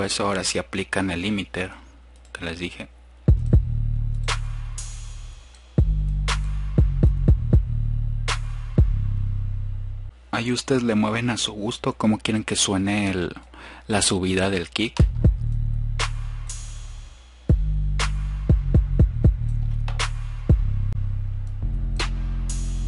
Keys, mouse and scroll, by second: 10.1 click, 12.6-13.5 drag, 21.1 F1, 21.1 click.